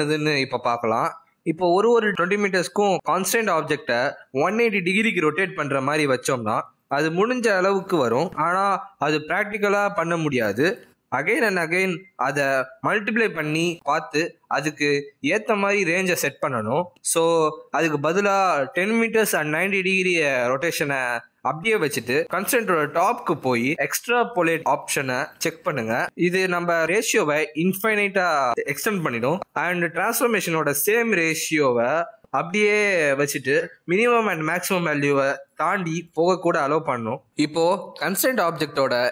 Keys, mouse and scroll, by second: 4.4 click, 5.1 click, 6.2 click, 7.5 click, 8.0 g, 14.0-14.6 scroll down 4, 14.6 g, 17.2-18.5 scroll up 6, 17.5 click, 18.5 click, 20.3 click, 24.3 click, 25.2 click, 25.7 g, 29.0-29.7 scroll down 5, 29.7 g, 35.3-35.7 scroll up 4, 35.7 g, 37.1 click, 37.7 middle click.